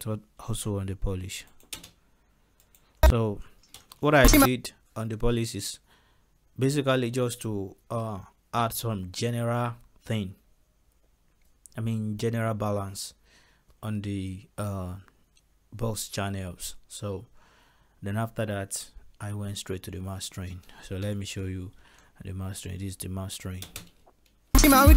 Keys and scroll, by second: 0.3 ctrl+s, 1.8 space, 3.8 ctrl+space, 21.2 m, 21.8 ctrl+s, 23.7 space.